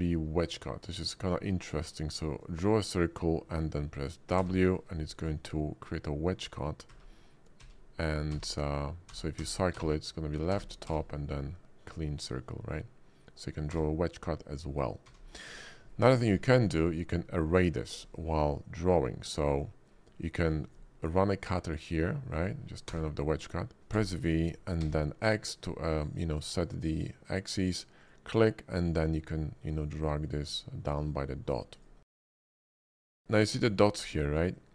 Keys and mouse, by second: 0.4-0.8 middle drag, 1.6-2.4 drag, 4.4 w, 6.9-10.8 typing, 13.7 w, 15.0 w, 15.4 click, 16.6-16.9 drag, 17.2 shift+click, 17.8 click, 19.9 click, 20.7-22.5 drag, 22.9 w, 23.9 v, 24.8 x, 28.0 click, 29.7-31.8 drag, 32.1 click, 32.8 ctrl+z, 33.6 shift+middle drag, 34.5-34.7 drag.